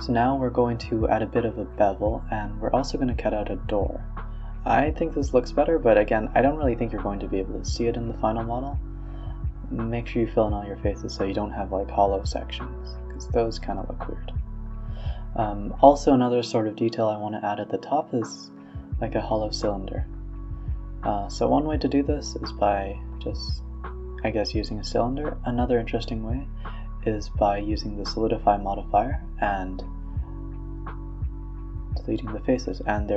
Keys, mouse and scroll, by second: 1.1-1.9 middle drag, 1.9 Tab, 2.1 middle drag, 2.4 ctrl+r, 3.1 middle click, 3.6-6.1 typing, 4.1-4.6 middle drag, 4.9 middle click, 5.9 middle click, 6.7 scroll up 4, 6.9-7.3 middle drag, 7.3 click, 7.5 click, 7.9-8.4 middle drag, 8.4-9.0 right drag, 9.0 f, 9.3 middle click, 9.6 ctrl+z, 9.8 click, 10.0 middle click, 10.2 shift+drag, 10.5 shift+click, 10.8 shift+click, 11.0 f, 11.3 click, 11.5 shift+click, 12.0 shift+click, 12.3 shift+click, 12.8 f, 13.0 scroll down 1, 13.1 Tab, 13.2 Tab, 13.4 Tab, 13.6-14.8 middle drag, 14.8 scroll down 3, 15.1-16.8 middle drag, 17.1-18.4 middle drag, 18.4 click, 19.1 shift+a, 21.3 r, 22.9 g, 23.3 s, 23.7 g, 24.1 middle click, 24.5 Tab, 24.7 middle click, 24.8 Tab, 25.0 s, 26.0 Tab, 26.2 middle click, 26.8 click, 27.2 click, 27.4 x, 27.8 middle click, 28.4 click, 28.5 x, 28.8 middle click, 29.0 Tab, 29.3-32.4 drag, 32.4 middle drag, 32.7 right click.